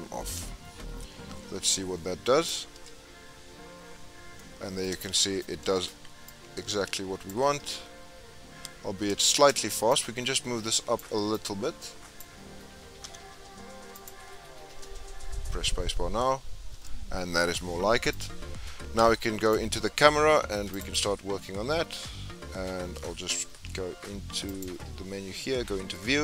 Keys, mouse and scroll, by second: 1.7-2.7 drag, 2.7 space, 3.3-4.0 scroll down 7, 4.3-5.7 middle drag, 5.7 space, 6.3-7.5 drag, 7.5 space, 8.9-9.3 scroll up 4, 9.3 space, 9.9-11.7 drag, 13.0 g, 14.6 space, 16.7 space, 18.1-20.9 drag, 21.6-22.0 scroll up 1, 22.0-22.6 scroll down 1, 24.5-26.2 drag.